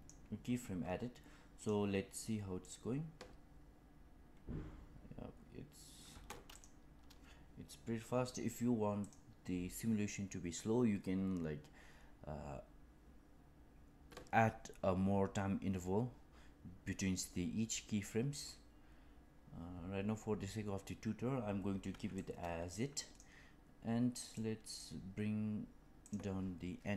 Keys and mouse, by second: 1.6 click, 2.5 click, 6.0 space, 9.0 click, 22.1-23.1 drag, 24.3-24.7 drag, 26.1-26.9 drag.